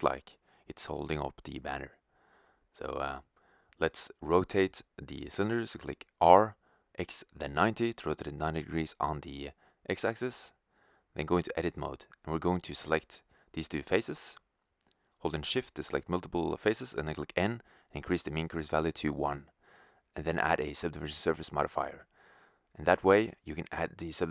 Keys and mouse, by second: 5.0 r, 9.7-13.7 drag, 10.3 typing, 12.8 right click, 13.3 middle click, 13.7 middle click, 13.9 click, 13.9 right click, 15.4 n, 16.5 middle click, 16.5-23.2 drag, 23.2-24.3 middle drag.